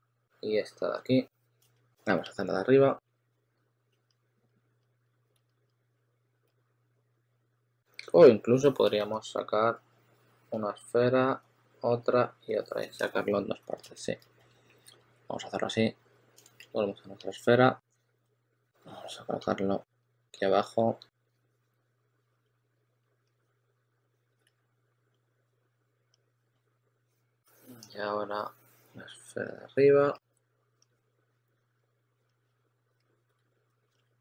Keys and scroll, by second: 1.4-3.8 typing, 4.9-6.4 typing, 8.8 shift+super+d, 9.3 shift+super+d, 12.6 shift+super+x, 13.6 super+z, 13.8 super+z, 14.0 super+z, 16.4 w, 20.2 w, 21.1 q, 23.3-24.9 typing, 30.9 typing, 31.9-34.2 typing.